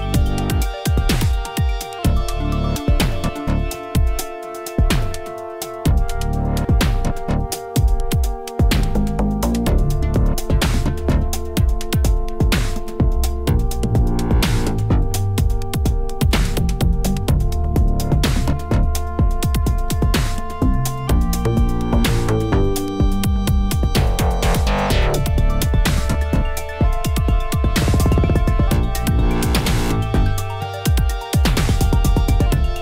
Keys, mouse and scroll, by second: 0.4 click, 1.0 g, 3.5-4.5 middle drag, 4.5 l, 4.7 middle click, 5.0 s, 6.0 shift+middle click, 6.8 click, 11.2 shift+click, 11.6 s, 13.0 s, 14.3 shift+click, 14.6 alt+shift+click, 14.7 alt+shift+click, 15.7 alt+shift+click, 15.9 s, 16.7 alt+shift+click, 16.8 alt+shift+click, 17.1 s, 17.6 Tab, 17.7 scroll down 5, 17.9 middle drag, 18.2 click, 18.4-19.0 middle drag, 19.0 ctrl+s, 19.0-19.5 scroll up 4, 19.5-19.8 middle drag, 19.8-20.3 scroll down 2, 20.3-25.1 shift+middle drag, 25.1-25.9 scroll down 2, 25.9 alt+middle click, 26.8-32.8 shift+middle drag.